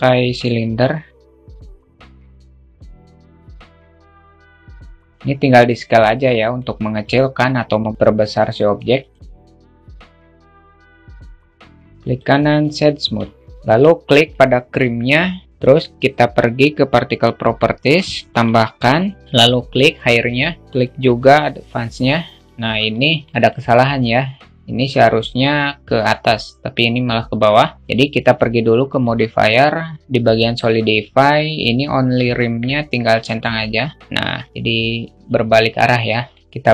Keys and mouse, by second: 1.2 click, 1.8 s, 2.7 alt+shift+middle drag, 3.2 click, 3.8 click, 4.1 s, 4.6 middle click, 5.9 click, 10.1 alt+shift+middle click, 10.6 click, 11.3-12.6 alt+shift+middle drag, 13.4 middle click, 13.7 click, 16.5 click, 17.8 click, 19.4 click, 22.1 alt+middle click, 23.0-28.3 alt+middle drag, 28.3-32.9 drag, 35.6 alt+middle click, 36.6 click.